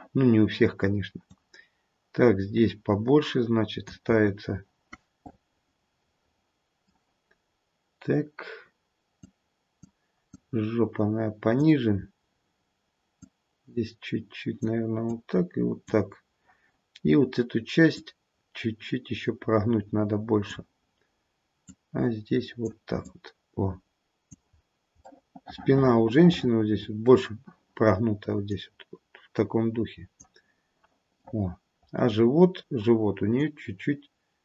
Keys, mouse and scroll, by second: 1.2 click, 4.1-5.8 scroll down 2, 5.8 middle click, 5.8-6.4 scroll down 2, 9.1 click, 10.3 click, 12.0-13.2 scroll up 2, 13.2 click, 15.1 click, 17.9 click, 21.7 click, 23.0 click, 24.6-25.1 scroll down 2, 25.1 middle click, 28.5 click, 31.3 middle click, 33.4 click.